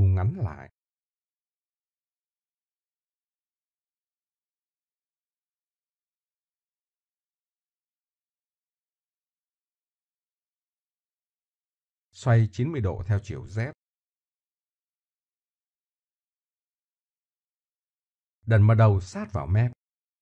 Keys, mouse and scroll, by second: 1.6 Tab, 2.8 a, 3.1 a, 3.7 v, 8.2 Tab, 10.0 s, 15.0 r, 19.3 Tab, 19.8-20.2 drag.